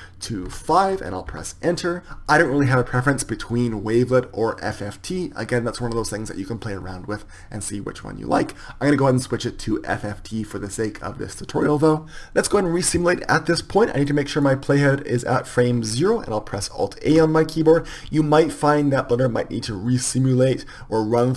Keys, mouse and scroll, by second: 14.5-18.1 drag.